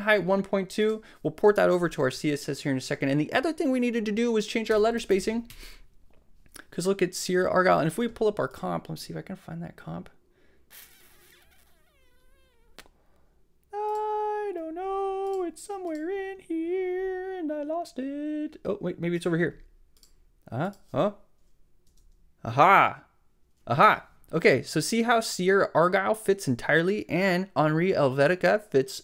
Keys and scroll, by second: 4.5-5.5 typing, 5.5 Tab, 21.9 space.